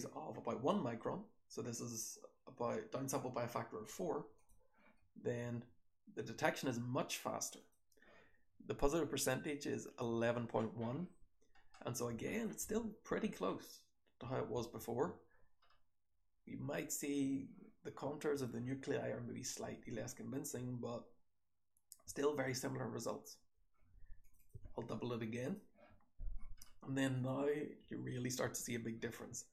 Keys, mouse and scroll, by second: 7.5 click, 11.6-12.2 scroll up 2, 12.2 click, 12.2-12.7 scroll up 1, 12.6 h, 13.0 h, 13.1-13.5 scroll up 2, 13.5-15.8 scroll down 3, 14.1 h, 14.5 h, 15.8-19.1 scroll up 2, 16.0 h, 16.6 h, 19.1-20.0 scroll up 1, 19.1 h, 19.6 h, 20.0-24.2 scroll down 1, 26.6-27.8 scroll up 1, 27.1 click, 27.8-29.5 scroll up 1, 27.8 h, 28.4 h.